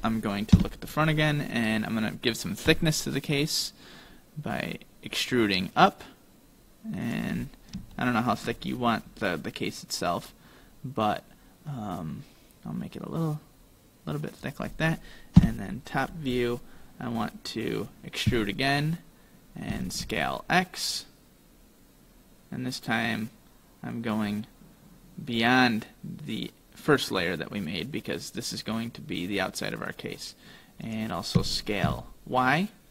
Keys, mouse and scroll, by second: 0.6 KP_1, 2.7 e, 7.4-8.0 scroll up 3, 8.0 shift+middle click, 8.7-9.5 scroll up 1, 10.1 click, 15.4 KP_7, 16.2-16.8 scroll down 2, 16.8-18.3 scroll down 2, 18.3 e, 31.4 s.